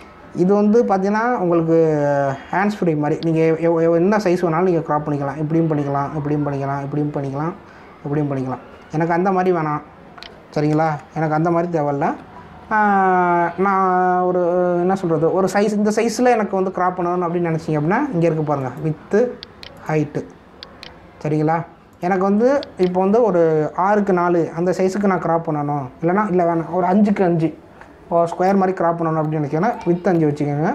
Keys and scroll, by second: 0.9 ctrl+z, 11.8 ctrl+Return, 12.9 ctrl+z.